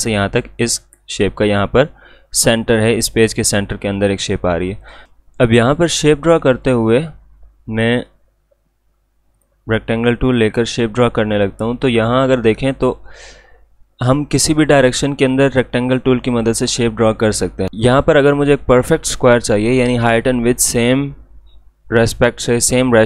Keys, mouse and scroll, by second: 4.8 click, 9.3-17.7 drag.